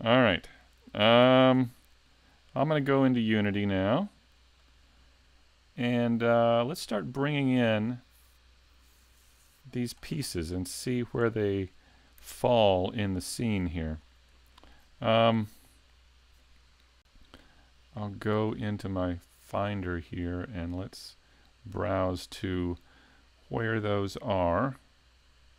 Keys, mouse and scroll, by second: 1.4 s.